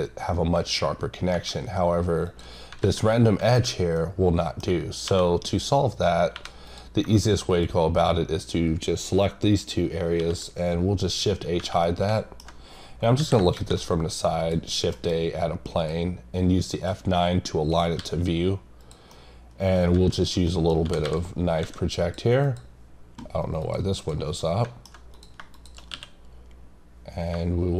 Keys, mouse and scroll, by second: 1.4-1.8 scroll up 3, 2.2 click, 3.7 scroll down 2, 4.0 middle click, 5.5 click, 6.7 click, 11.4 scroll, 11.8 middle click, 14.4 click, 15.8 click, 19.1 middle click, 20.5 middle click, 22.0 click, 22.4 click, 24.4 middle click, 25.1 click, 25.5 click.